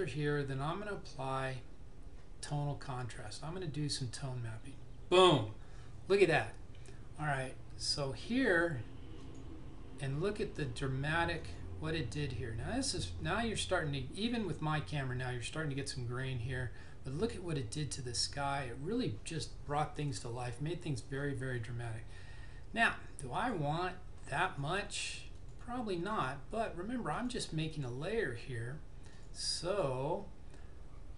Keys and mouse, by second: 3.0 click, 8.6 click, 23.5 click.